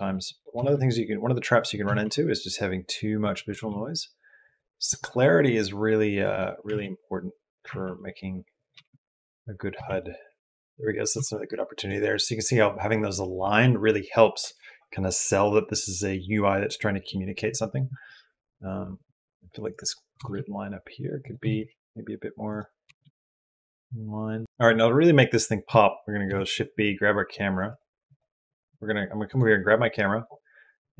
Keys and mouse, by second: 0.5 s, 1.7 g, 3.3 g, 6.0 click, 6.5 r, 8.7 g, 10.9 g, 20.0 g, 21.3 g, 22.7 g, 26.1 shift+b, 26.3-27.5 middle drag, 27.5 click.